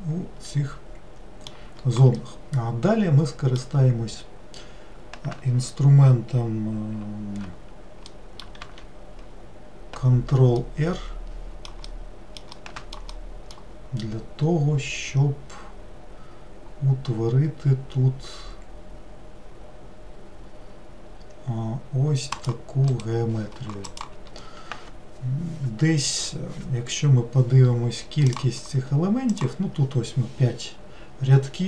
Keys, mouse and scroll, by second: 8.1 middle click, 8.7 ctrl+r, 29.4-31.6 drag.